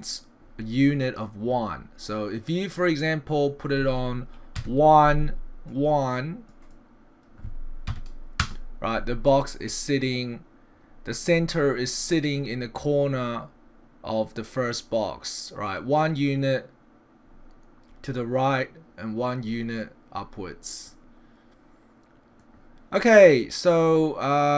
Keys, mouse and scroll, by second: 2.7 click, 6.5 click, 11.4-14.9 scroll up 5, 20.9 middle click, 23.8 click.